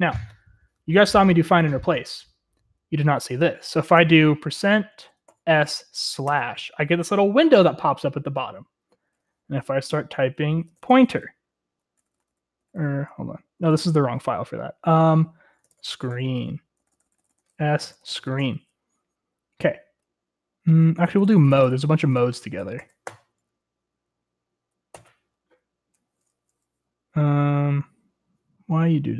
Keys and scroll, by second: 4.8-6.3 typing, 10.2-11.0 typing, 12.1 typing, 14.8 typing, 16.3-19.4 typing, 21.1-24.0 typing, 25.0 typing.